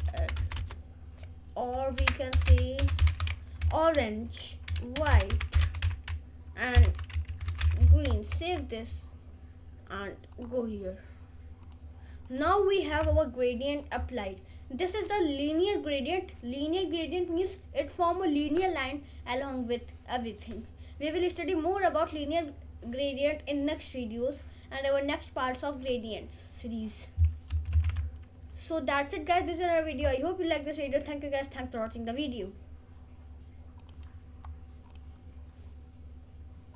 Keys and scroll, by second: 0.6 BackSpace, 1.9-8.1 typing, 8.3 ctrl+s.